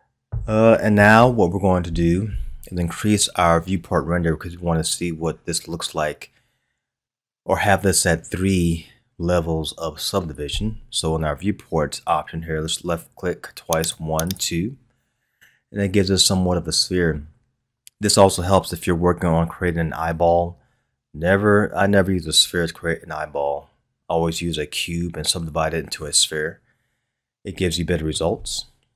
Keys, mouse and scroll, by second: 13.8-14.8 drag, 17.4-20.5 scroll up 1, 22.8-25.8 scroll down 1, 26.0-28.9 middle drag.